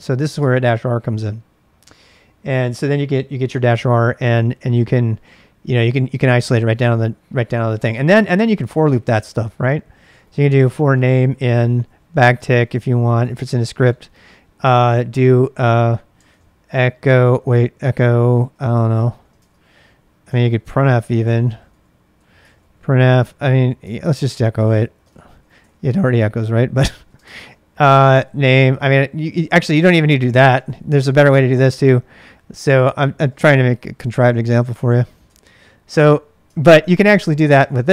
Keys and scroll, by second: 0.0-0.3 typing, 0.3 Return, 4.3-5.0 typing, 8.2-29.3 typing, 30.4-31.1 typing, 33.0-35.5 typing, 36.5 ctrl+[, 36.6-37.9 typing.